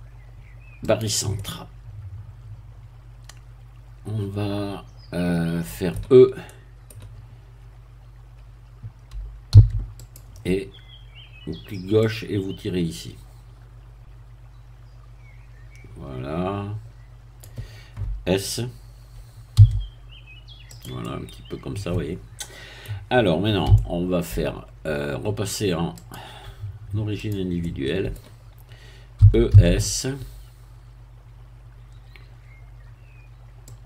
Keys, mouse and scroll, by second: 0.9 click, 1.3-7.4 middle drag, 9.5 e, 10.0 click, 12.1-19.5 drag, 19.5 s, 20.7-23.0 drag, 21.0-23.0 middle drag, 23.7 shift+middle click, 24.5 shift+scroll up 2, 26.0 click, 27.2 click, 27.6 middle click, 29.2 e, 29.5 s, 33.7 click.